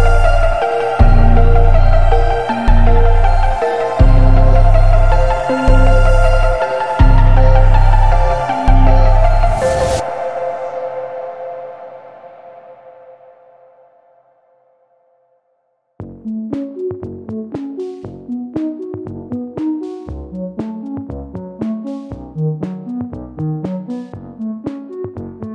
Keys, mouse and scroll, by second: 3.6-6.6 drag, 6.8-7.1 scroll down 2, 7.1-12.9 middle drag, 12.9 click, 14.3-15.7 shift+middle drag, 15.7 click, 16.6 click, 17.0 click, 17.3 click, 17.6 click, 19.5 click.